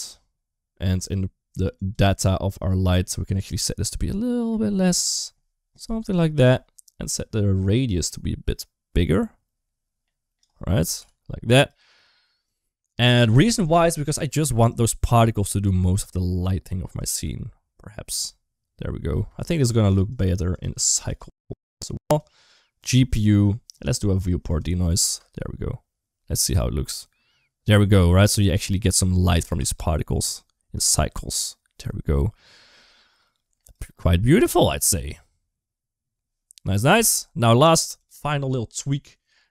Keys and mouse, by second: 1.6 click, 3.3-6.2 drag, 7.8-10.2 drag, 10.7 g, 14.5-16.8 drag, 16.9 space, 18.9 space, 20.3 click, 21.9 click, 24.3 click, 24.8 space, 29.2 space, 30.0-33.5 drag, 33.6 space, 36.7 space, 37.2 click, 37.7 click.